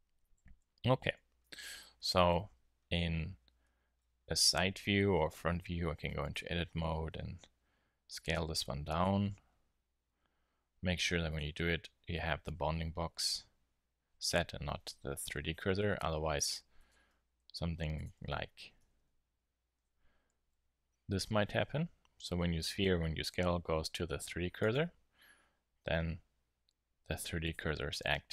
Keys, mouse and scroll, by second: 0.3 KP_1, 0.9 KP_3, 1.4 z, 3.0 z, 5.9 Tab, 6.6 s, 9.0-11.0 drag, 10.0 Tab, 11.3-13.1 drag, 15.7-16.8 middle drag, 16.8 Tab, 17.2 s, 18.8 ,, 19.7 ., 20.4 s, 24.7-26.6 drag, 27.4-28.3 drag.